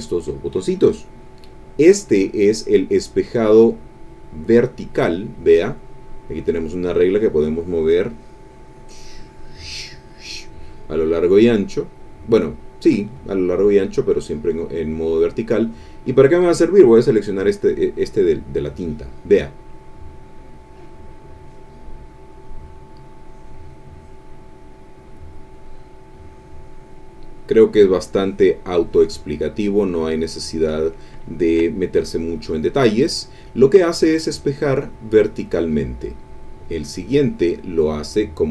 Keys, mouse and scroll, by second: 2.6 click, 6.1-12.5 drag, 17.0 click, 20.1-21.7 drag, 23.1-24.3 drag, 26.0-30.2 drag, 31.2 ctrl+middle click, 31.4 ctrl+click, 31.8 ctrl+click, 32.1 middle click, 33.0 middle click, 35.6 click, 36.7 click.